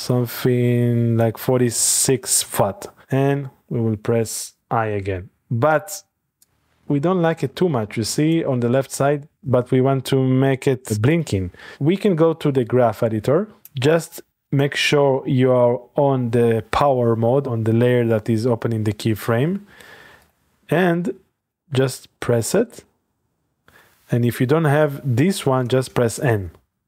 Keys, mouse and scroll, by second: 4.6 i, 6.5 click, 8.4 click, 9.4 click, 11.1 click, 13.6 click, 14.5 click, 19.6 a, 20.2 click, 20.5 a, 21.4 click, 21.7 a, 22.7 click, 25.7-26.5 typing.